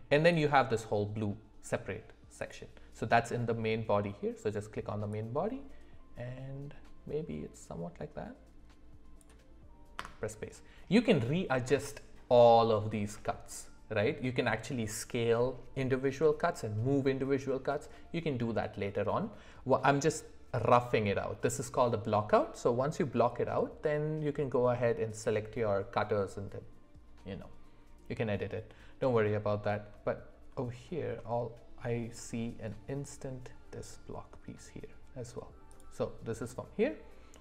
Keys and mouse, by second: 2.4 click, 5.1-10.4 drag, 35.7 click.